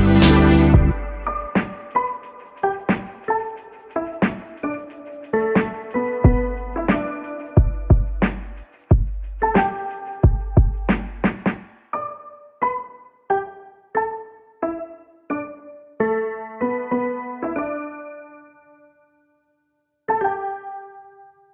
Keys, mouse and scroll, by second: 4.5 click, 8.0 click, 9.0 shift+click, 11.1 shift+click, 13.9-15.5 drag, 17.8-21.5 drag.